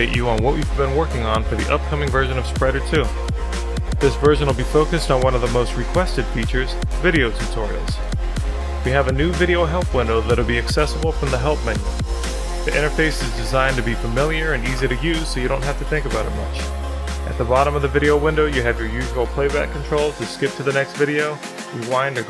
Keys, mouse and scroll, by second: 0.8-4.1 shift+drag, 4.1 shift+middle drag, 5.3-7.3 drag, 8.3 click.